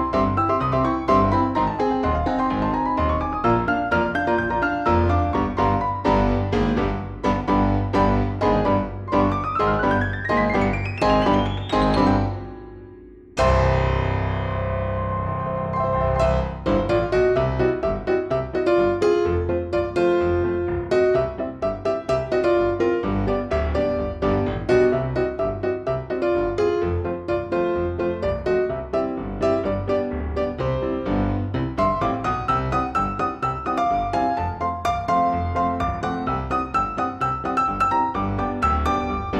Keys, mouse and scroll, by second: 1.1 click, 1.9-3.6 typing, 4.4 click, 6.6 click, 8.0 click, 10.0 click, 14.5 click, 16.5 click, 18.9 click, 19.9 click, 21.5 shift+click, 22.6 ctrl+z, 23.1 ctrl+shift+click, 23.6 ctrl+shift+click, 24.0 ctrl+shift+click, 24.5 ctrl+shift+click, 25.7 click, 26.6 click, 27.1 click, 27.9 ctrl+z, 28.5 ctrl+click, 29.3 ctrl+z, 30.0 F1, 32.0 click, 32.8-33.9 drag, 36.7 click, 38.6 ctrl+z.